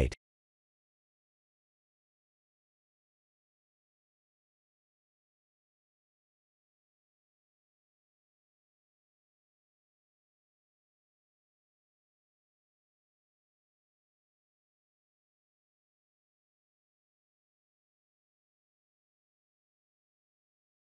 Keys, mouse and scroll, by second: 0.7 s, 6.8 middle click, 7.0 middle click, 7.6 middle click, 8.3 middle click, 10.3 shift+d, 11.8 s, 13.7 shift+middle click, 14.3 middle click, 15.9 s, 19.1 g.